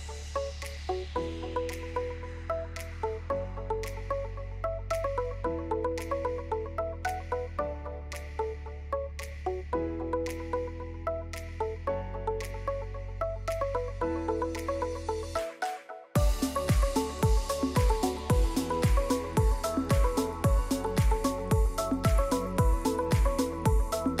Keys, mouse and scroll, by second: 0.1 click, 1.4 click, 2.5 click, 3.6 click, 3.9 scroll, 4.0 scroll down 3, 4.4 click, 5.0 click, 6.8-7.8 scroll up 47, 7.3 right click, 7.6 Right, 7.8 Right, 9.7 right click, 9.7 click, 10.3 alt+click, 11.4 right click, 11.4 click, 12.0 click, 12.8 click, 13.5 click, 14.5 Escape, 14.5 click, 15.2 Delete, 15.5 click, 15.8 Right, 16.0 click, 16.8 right click, 17.6 right click, 17.6 Escape, 19.8 click, 20.9 click, 22.0 Escape, 22.0 click, 22.8 click, 23.6 click, 24.0 click.